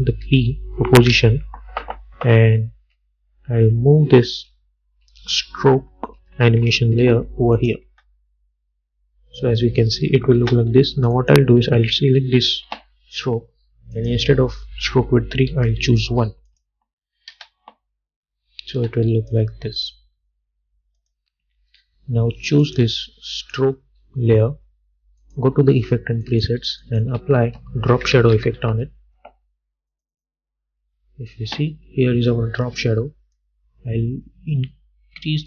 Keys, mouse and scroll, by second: 0.3 p, 3.0 Left, 5.2 Up, 6.7 Left, 7.7 click, 8.0 space, 10.5 space, 11.3 click, 14.1 click, 16.6 click, 17.4 space, 19.4-21.1 drag, 27.3 ctrl+a, 27.8-29.2 typing, 30.0 click, 31.0-31.3 alt+scroll up 1, 33.8-35.4 drag.